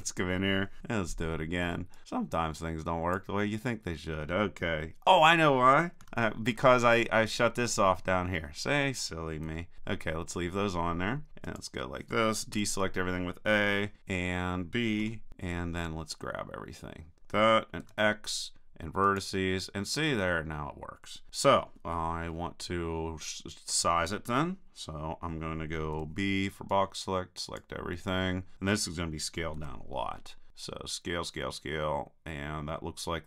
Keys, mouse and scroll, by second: 0.8 b, 6.0 super+z, 6.4 super+z, 9.4 super+z, 9.7 super+z, 12.5 a, 14.0-17.2 drag, 15.0 b, 17.8 x, 24.1 middle click, 25.9 b, 29.6 s.